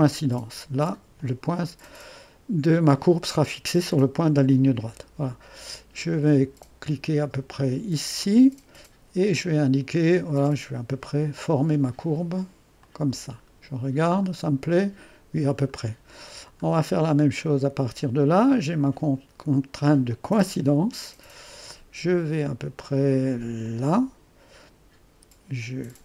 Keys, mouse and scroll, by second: 0.0-3.7 drag, 8.2-11.3 drag, 12.9 click, 13.6-14.5 scroll down 2, 14.5-17.6 scroll down 1, 17.6-18.6 scroll down 1, 20.1-23.1 drag, 23.7 click.